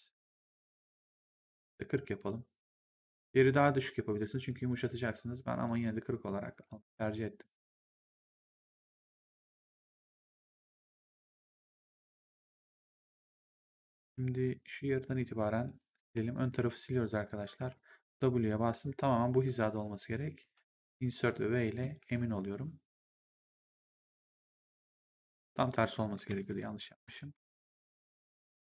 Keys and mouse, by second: 1.4 click, 2.7 click, 4.4 click, 5.5 right click, 6.2 click, 8.3 click, 13.4 right click, 14.5 click, 15.0 shift+click, 15.9 Delete, 16.2 click, 16.5 Delete, 17.0 right click, 17.5 w, 19.3 Insert, 20.0 click, 20.8 v, 21.3 middle click, 21.9 w, 26.1 ctrl+z, 28.3 ctrl+z.